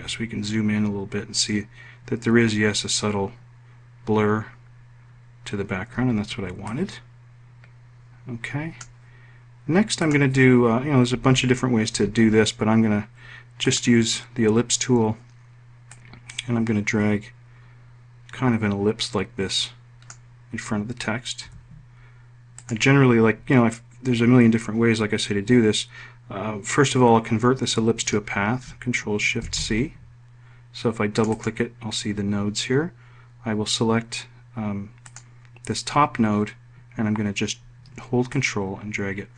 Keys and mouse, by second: 16.8-21.1 drag, 22.3 F1, 23.4 click, 30.3 ctrl+shift+c, 32.0 click, 35.9 click, 39.2-39.3 ctrl+drag.